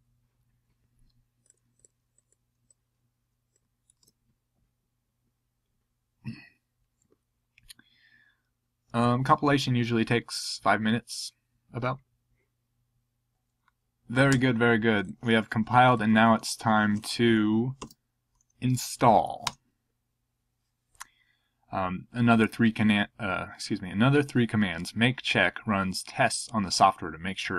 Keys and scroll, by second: 3.9 super+c, 14.1 Up, 14.3 Down, 17.8 super+v, 19.4 Return.